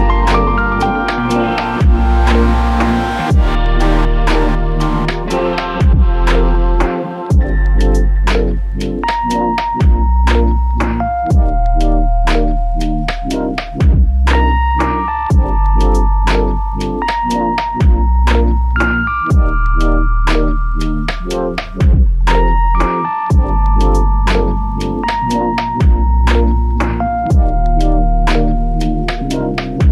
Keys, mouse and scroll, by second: 1.9 typing, 24.2 typing, 24.6 Return, 26.9 typing.